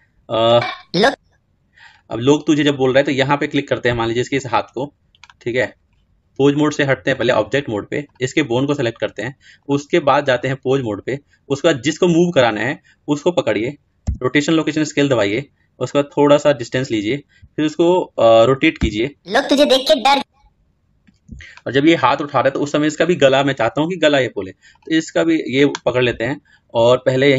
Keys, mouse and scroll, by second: 13.7 i, 15.8-26.9 drag.